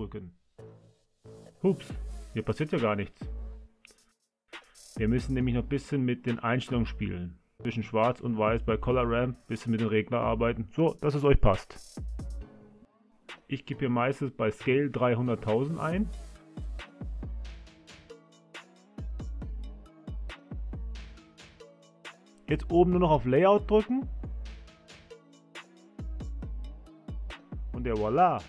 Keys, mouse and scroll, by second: 24.6 click, 26.2 click.